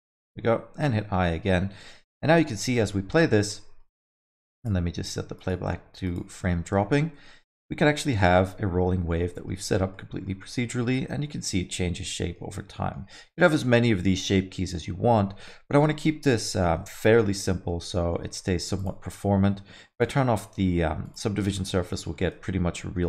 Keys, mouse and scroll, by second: 0.9 i, 1.3 middle click, 2.1 shift+Left, 2.3 space, 3.0 alt+middle click, 3.4 scroll up 1, 3.5 middle click, 4.6 click, 6.5 alt+middle click, 6.9 alt+shift+z, 7.2 middle click, 7.6 scroll up 2, 7.9 alt+middle click, 9.2 alt+middle click, 10.0 middle click, 12.1 middle click, 12.5 scroll down 1, 12.8 alt+middle click, 14.1 middle click, 17.1 n, 17.4 middle click, 17.9 alt+middle click, 18.4-18.8 scroll up 1, 18.8 click, 20.0 click, 21.0 click, 21.5 middle click, 21.9 scroll down 1, 22.1 alt+middle click, 22.4 alt+shift+z.